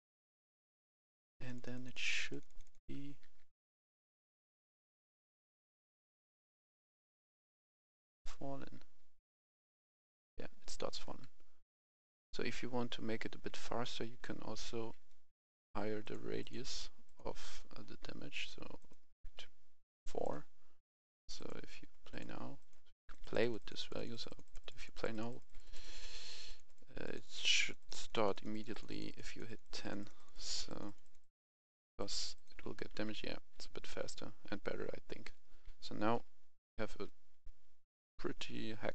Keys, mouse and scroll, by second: 0.3 click, 2.1-3.4 typing, 2.3 click, 4.9 s, 5.2 d, 5.7 click, 6.8 s, 7.0 click, 8.8 w, 9.0 a, 10.4-11.1 typing, 12.8-14.3 typing, 15.3 Escape, 16.0-18.5 drag, 19.9 4, 20.2 click, 22.8-23.4 typing, 23.0-27.6 drag, 30.5-31.3 typing, 30.8 click, 31.4 click, 32.7 a, 33.0 s, 33.4 a, 34.0 w, 35.3-36.3 typing, 37.7-38.9 typing.